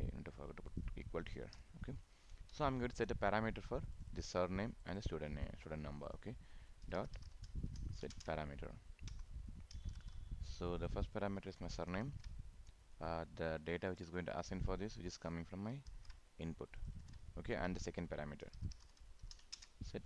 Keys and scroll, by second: 8.1 ctrl+space, 12.0 ctrl+c, 14.0 ctrl+v, 15.9 ctrl+c, 17.0 ctrl+v, 19.5 ctrl+space.